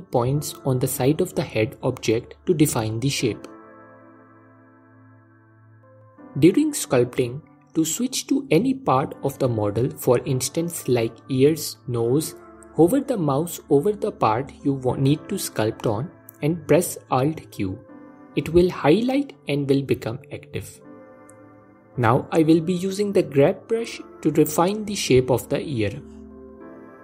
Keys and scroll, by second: 16.9 alt+q.